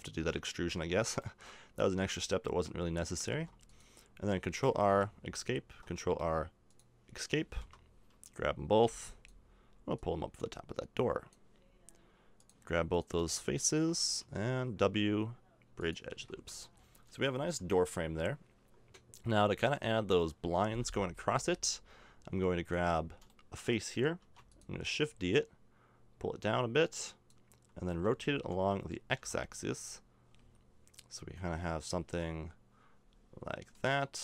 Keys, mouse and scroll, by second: 1.8 Tab, 3.3 ctrl+r, 5.7 ctrl+r, 8.8 b, 12.3 b, 14.2 w, 16.1 a, 16.3 Tab, 16.6 middle click, 19.3-21.3 middle drag, 21.3 Tab, 22.0 middle click, 22.6 right click, 23.3 middle click, 24.2 shift+d, 27.9 r.